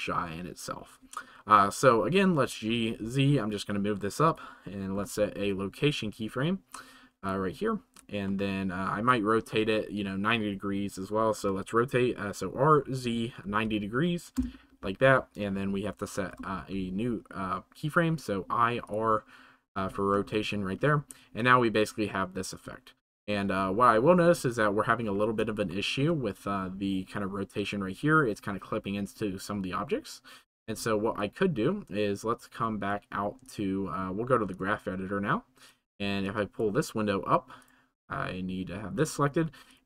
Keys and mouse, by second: 2.4 g, 3.0 z, 4.3 click, 4.9 i, 8.2-9.0 shift+middle drag, 11.4 r, 12.8 z, 13.4 9, 13.6 0, 14.4 Return, 16.3 i, 20.3-20.7 shift+middle drag, 21.4-22.8 drag, 22.8-24.5 middle drag, 30.7-32.5 drag, 32.5-33.4 right drag.